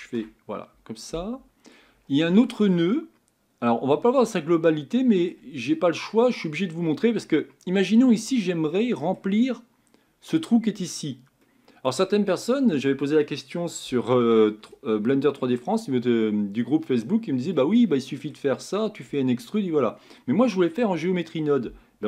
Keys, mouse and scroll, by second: 0.0 ctrl+space, 1.1-1.9 middle drag, 1.9-2.7 scroll up 4, 2.7-5.6 middle drag, 5.6-6.2 scroll down 4, 6.2-8.2 middle drag, 8.2-8.7 scroll up 3, 8.7-11.0 middle drag, 11.0-11.4 scroll down 4, 11.4-22.0 middle drag.